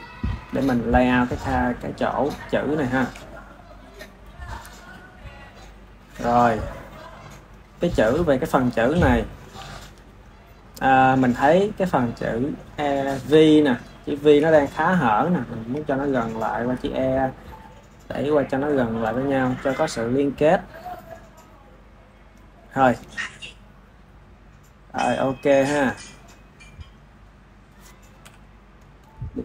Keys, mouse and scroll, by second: 2.3-3.6 shift+middle drag, 3.6 click, 6.1 click, 8.7-11.1 ctrl+middle drag, 11.1 ctrl+s, 11.7 click, 12.6 drag, 13.3 KP_1, 14.0-16.2 shift+middle drag, 16.2 click, 18.8 click, 26.2 ctrl+s, 27.2 ctrl+s, 27.3 click, 28.1 KP_7, 28.9-29.4 shift+middle drag.